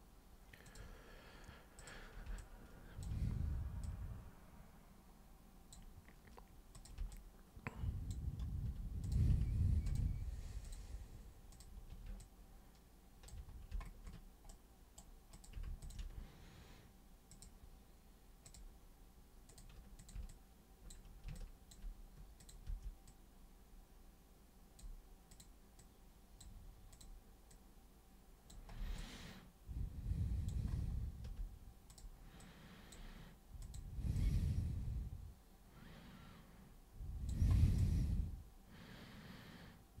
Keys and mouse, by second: 0.7 super+click, 1.8 super+click, 2.4 alt+super+click, 3.8 super+click, 6.8 super+click, 7.2 alt+super+click, 9.0 super+drag, 9.9 ctrl+shift+super+click, 10.7 super+click, 11.5 super+click, 12.2-13.3 alt+super+drag, 14.5 super+right click, 15.3 super+click, 15.8 ctrl+shift+super+click, 17.3 super+click, 18.5 super+click, 19.5 super+click, 20.0 super+click, 20.3 alt+super+click, 21.4 alt+super+click, 22.4 super+click, 22.7 super+w, 23.1 super+click, 25.4 super+click, 25.8 super+click, 26.9 super+click, 27.5 super+click, 29.0-30.5 alt+super+drag, 31.9 super+click, 32.4 super+click, 33.7 super+click, 34.2 super+click, 37.8-40.0 alt+super+drag.